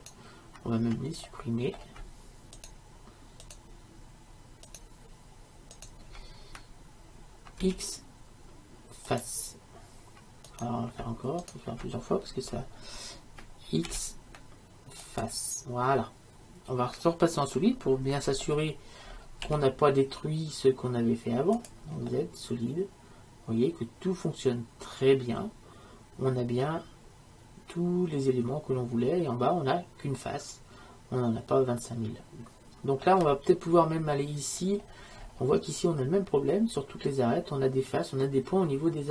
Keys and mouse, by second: 0.0-7.7 right drag, 7.7 x, 10.6-13.4 right drag, 14.0 x, 16.1-18.2 middle drag, 19.2 middle click, 19.5 z, 22.2 middle click, 23.0 middle click, 25.7 middle click, 25.9 middle click, 26.1 middle click, 34.7-38.8 middle drag.